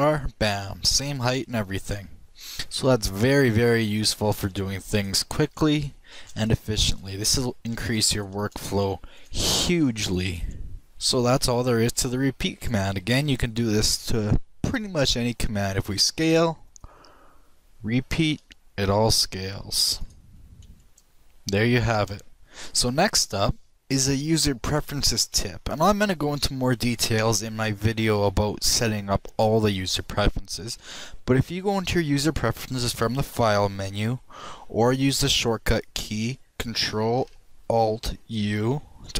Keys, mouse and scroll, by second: 0.6 shift+r, 1.6 middle click, 2.3 middle click, 2.9 middle click, 3.1 middle click, 4.7-6.4 shift+right drag, 5.1 shift+r, 6.2 shift+r, 6.9 shift+r, 7.6 shift+r, 8.6 shift+r, 9.2 shift+r, 10.1 shift+r, 11.1 shift+r, 11.9 shift+right click, 14.5 shift+middle drag, 16.6 s, 17.9-18.9 right drag, 18.7 shift+r, 20.8 right click, 21.4 shift+r, 22.0 shift+right click, 33.4 click.